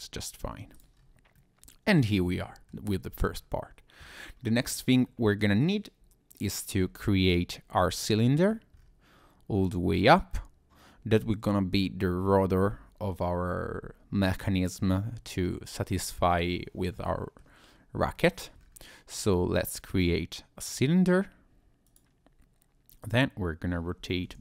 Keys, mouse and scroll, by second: 0.4 Tab, 0.7 click, 0.9 scroll down 1, 1.3 middle click, 2.9-3.3 scroll down 1, 3.3-4.4 scroll up 3, 4.4-5.0 scroll down 1, 5.1 middle click, 6.7-7.7 scroll down 4, 7.7 middle click, 8.7 scroll up 2, 9.1 scroll down 2, 10.3 middle click, 17.0 middle click, 17.7-18.0 scroll down 1, 18.1 shift+middle click, 18.6-19.1 scroll up 2, 19.1 scroll down 1, 19.4 shift+a, 23.0 click, 24.0 r.